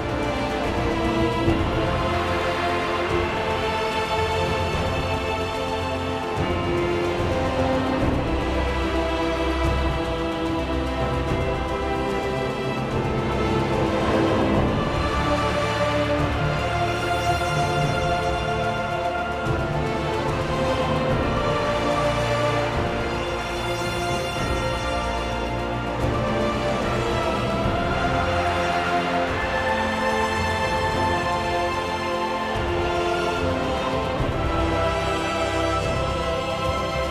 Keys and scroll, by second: 4.2 1, 8.0 1, 9.6 1, 11.0 1, 33.5 ctrl+1.